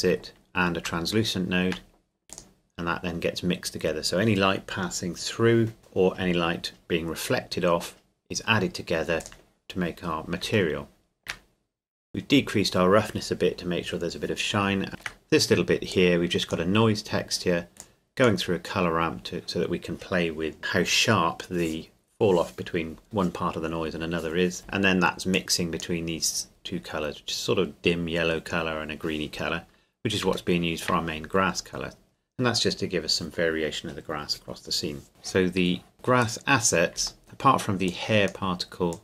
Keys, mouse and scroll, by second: 1.0 shift+middle click, 2.3 click, 9.2 click, 10.8 shift+middle click, 11.6-13.6 scroll up 1, 14.9 shift+middle click, 15.9 click, 25.3 click, 30.2 click, 30.5 shift+middle click, 35.1-35.9 scroll down 2, 35.9 click, 36.2 right click, 36.2 right click, 37.2 click.